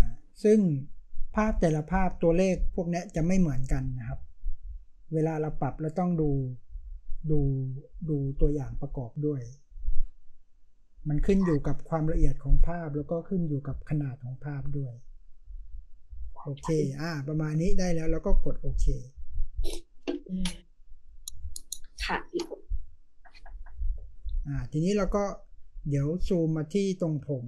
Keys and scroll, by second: 27.2 space.